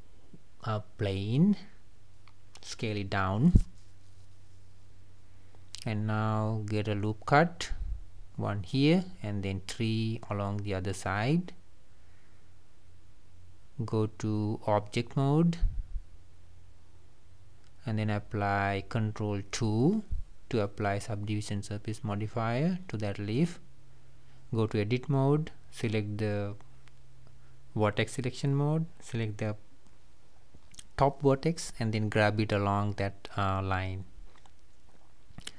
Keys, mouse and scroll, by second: 2.4 Tab, 2.7-3.5 scroll up 2, 3.5 scroll up 1, 3.7 shift+middle click, 4.5-4.8 scroll up 2, 8.4-16.4 drag, 17.4 click, 19.0 Tab, 22.3 ctrl+2, 24.8 Tab, 26.9 click, 28.2 click, 30.1 g, 34.6 click.